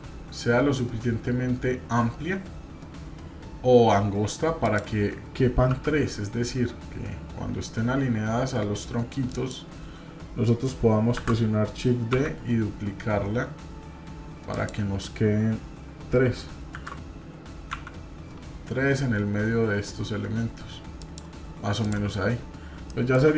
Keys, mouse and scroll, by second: 11.2 shift+d, 16.7 shift+d, 21.8 click, 22.2 scroll up 1, 22.9-23.2 shift+middle drag.